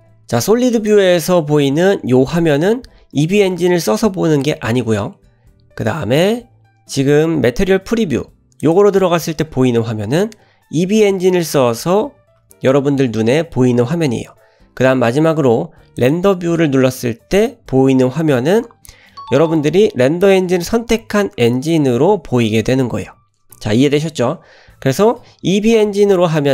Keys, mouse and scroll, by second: 0.8 click, 8.8 click, 16.1 click.